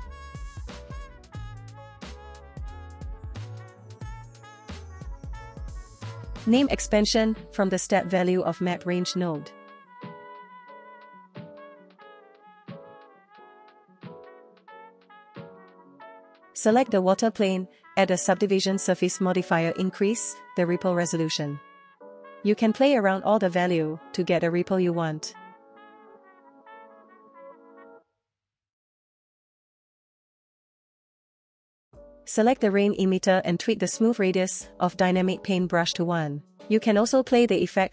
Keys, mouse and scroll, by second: 0.4 scroll down 1, 0.5 middle click, 0.9-1.2 scroll up 1, 1.2 click, 3.4 click, 4.2 click, 5.7-11.3 drag, 12.4 scroll down 1, 12.6 middle click, 13.9 click, 14.8 click, 14.8 right click, 14.8 space, 15.6 click, 16.1-19.1 drag, 19.3 click, 19.7 click, 19.8 space, 19.9 space, 20.0 space, 20.4 Tab, 20.5 right click, 20.9 click, 21.3 Tab, 21.6 click, 21.7 space, 21.8 space, 21.9 scroll up 3, 22.0 middle click, 22.0 click, 25.3-27.5 shift+drag, 27.5 shift+click, 28.3 shift+click, 28.6 shift+click, 29.0 shift+click, 29.3 shift+click, 29.8 shift+click, 30.0 space, 30.1 space, 30.3 shift+click, 31.3 click, 32.8-33.9 drag, 34.8 click, 36.6 click.